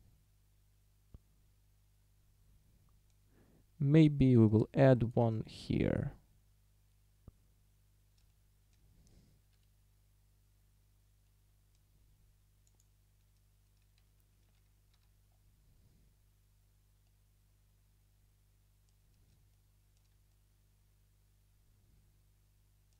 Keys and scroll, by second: 4.2 a, 9.6 ., 15.0 a.